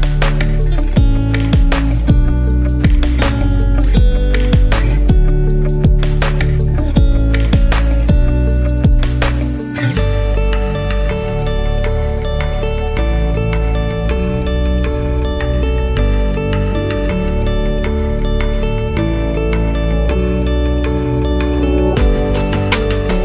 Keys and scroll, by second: 3.5 space, 7.2-7.7 typing, 8.8-9.5 typing, 13.8 space.